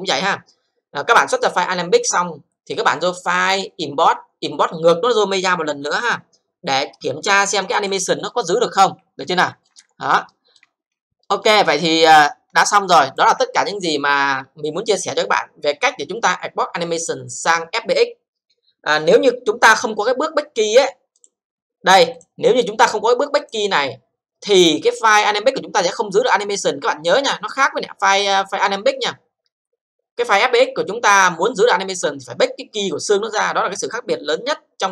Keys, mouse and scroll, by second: 3.3 click, 7.8 click, 8.4 alt+click, 9.0-9.4 alt+scroll up 3, 9.4 alt+middle click, 9.9 scroll up 1, 10.3 alt+middle click, 10.7 scroll up 1, 11.2 alt+middle click, 11.7-13.2 alt+drag, 13.4 alt+c, 21.2 click, 22.4 click, 23.4 click.